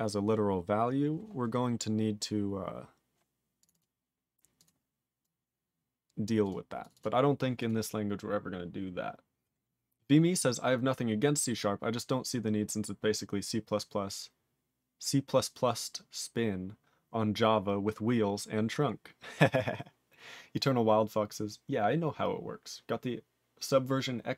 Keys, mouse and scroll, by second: 3.6 click, 3.6 click, 3.7 double click, 3.8 double click, 4.6 click, 4.6 click, 5.2 click, 6.2 click, 6.5 click, 6.8 click, 6.8 click, 6.9 double click, 7.0 double click, 7.6 click.